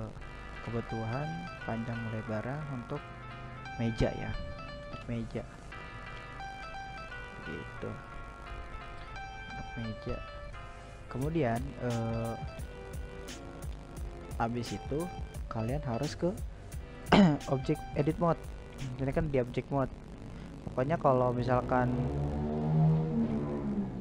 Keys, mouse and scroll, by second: 1.2 z, 2.3 g, 4.2-5.5 middle drag, 5.5-5.8 scroll up 2, 5.8-13.1 middle drag, 13.1-15.2 drag, 16.8 click, 23.9-24.0 middle drag.